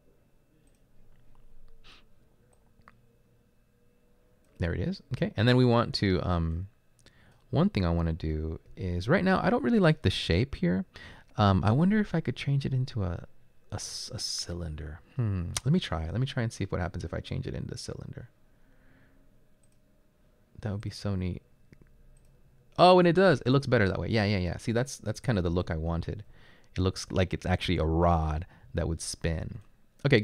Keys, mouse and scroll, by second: 8.7 s, 25.1-26.8 typing, 28.7 typing, 29.8-30.2 typing.